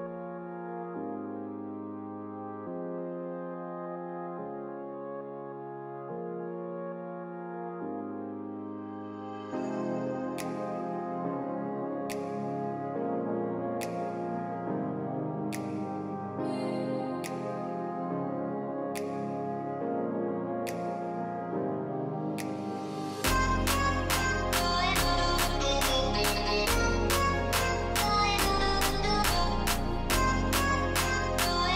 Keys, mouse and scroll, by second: 0.1 alt+scroll up 1, 1.3-2.0 typing, 3.0 double click, 3.3 typing, 4.0 double click, 4.7 alt+scroll down 1, 5.8 typing, 7.5 double click, 8.7-9.6 typing, 12.5 double click, 14.9 double click, 17.9-19.9 scroll down 1, 20.7 double click, 25.7 scroll down 1, 27.5 double click, 27.7-28.5 typing, 31.5 double click.